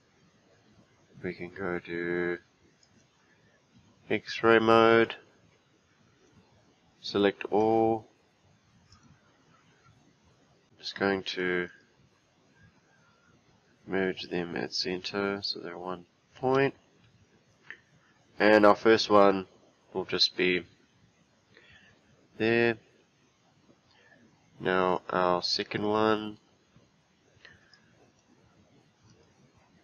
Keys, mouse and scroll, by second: 2.8-5.1 drag, 8.9-10.6 drag, 10.9 click, 11.7-14.7 right drag, 16.4 g, 25.0 click, 25.8 click, 27.7 click, 29.1-29.8 right drag.